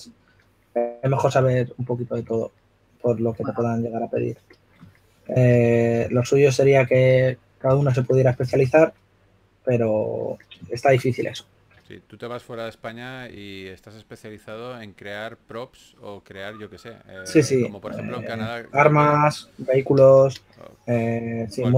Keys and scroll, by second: 3.1 4, 4.3 4, 6.9-8.6 typing, 10.2 typing, 13.3-14.4 typing.